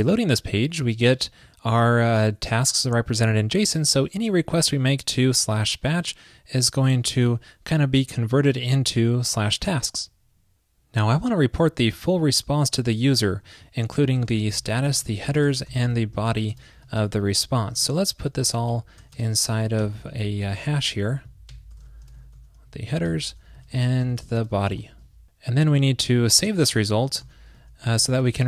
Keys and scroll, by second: 17.0 super+Return, 25.8 super+Left.